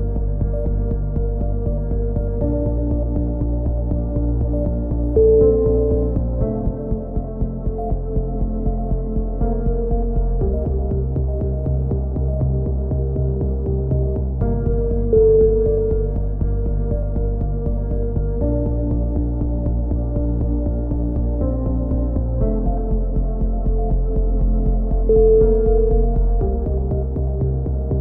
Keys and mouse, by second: 0.0 b, 1.0-2.9 drag, 4.2 a, 4.8-6.1 drag, 5.8 c, 6.6 click, 7.6 click, 9.3 a, 9.8 c, 10.7 click, 11.1 middle click, 11.7 click, 12.2 a, 13.0 click, 13.9 z, 14.3 click, 15.7-16.7 drag, 16.4 KP_3, 16.7 z, 18.9 ctrl+z, 19.2 c, 19.8-21.2 drag, 21.4 a, 21.8-22.8 drag, 22.8 middle click, 24.9 ctrl+z, 25.2 ctrl+z, 25.9 b, 27.8 b.